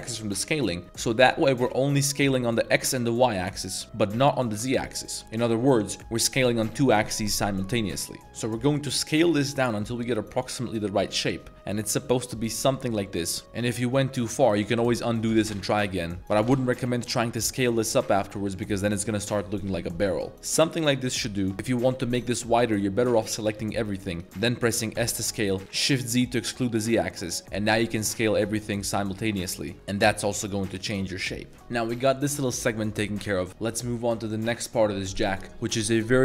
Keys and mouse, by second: 12.6 click, 12.8 Tab, 13.0-13.4 middle drag, 13.4 shift+z, 13.6 click, 13.8-14.4 middle drag, 14.8 ctrl+z, 15.3 s, 15.4 shift+z, 16.2 ctrl+z, 16.3 s, 20.3 shift+z, 20.8 click, 21.0 Tab, 21.2 middle click, 21.5 Tab, 22.1 middle click, 23.4 a, 24.9 s, 25.6 shift+z.